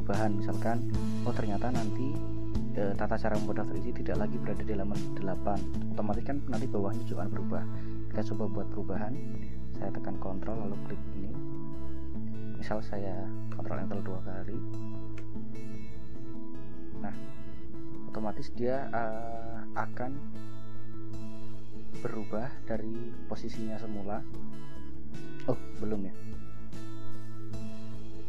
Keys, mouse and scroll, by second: 10.7 ctrl+click, 11.9 scroll up 2, 13.6 ctrl+Return, 15.3 ctrl+Return, 18.0-18.7 scroll up 4, 20.9 scroll up 2, 21.6-22.2 scroll up 4, 24.5 scroll up 2, 25.5 scroll down 2, 25.7 scroll up 2, 25.9-27.4 scroll down 8, 27.4-28.1 scroll up 2.